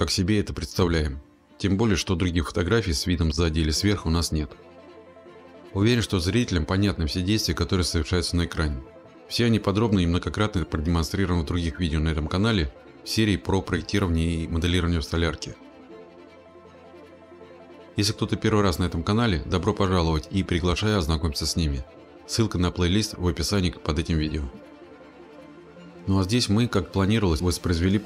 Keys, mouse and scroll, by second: 0.0 click, 0.2 middle click, 0.4 click, 0.8-1.7 scroll, 2.0 scroll, 2.4 click, 2.6 click, 3.7-5.3 typing, 5.1 click, 5.2 middle click, 5.4 middle click, 5.5 click, 5.6 right click, 5.8 click, 6.0 click, 6.1 click, 6.2 click, 6.6 click, 6.7 click, 6.9 click, 7.1 click, 7.1 click, 7.3 click, 7.9 click, 8.0 click, 8.1 middle click, 8.2 click, 8.4 click, 8.6 click, 8.9-10.0 scroll, 10.0 click, 10.2 click, 10.2 click, 10.3 click, 10.5 click, 10.8 click, 11.1 click, 11.4 scroll, 11.6 click, 12.1 click, 12.1 middle click, 12.2 middle click, 12.6 click, 12.6 click, 12.8 click, 13.2 Left, 13.4 click, 13.6 click, 13.9 click, 14.0 scroll, 14.5 click, 14.6 click, 14.7 click, 14.8 click, 15.0 click, 15.2 click, 15.4 click, 15.6 click, 15.6 click, 15.8 middle click, 16.0 middle click, 16.1 middle click, 16.1 scroll, 16.2 click, 16.4 click, 16.4 click, 16.6 click, 17.4 click, 17.6 click, 17.8 click, 17.8 click, 17.9 scroll, 18.0 middle click, 18.2 middle click, 18.4 click.